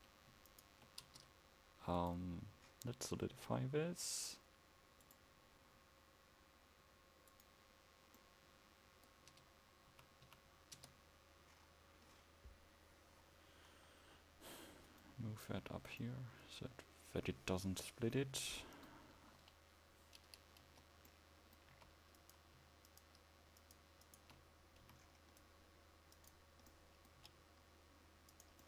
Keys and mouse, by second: 1.1 Tab, 9.4 Tab, 10.0 a, 10.9 Tab, 16.5-17.0 drag, 19.4 KP_1, 20.9 Tab, 21.8 a, 25.0 c.